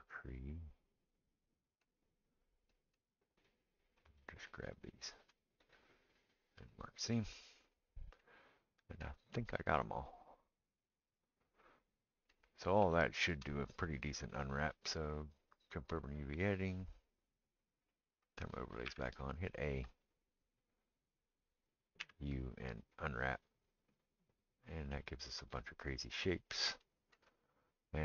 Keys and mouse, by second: 1.9-7.5 right drag, 3.4 click, 4.2 shift+click, 4.8 shift+click, 7.5 middle click, 7.7-28.0 right drag, 15.9 click, 15.9 middle click, 18.9 a, 22.0 u, 27.8-28.0 middle drag.